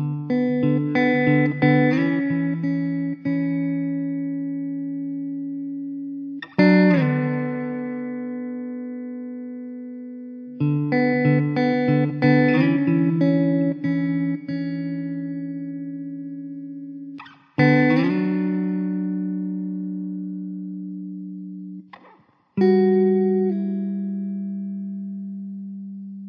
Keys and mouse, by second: 5.0 middle click, 14.6 middle click.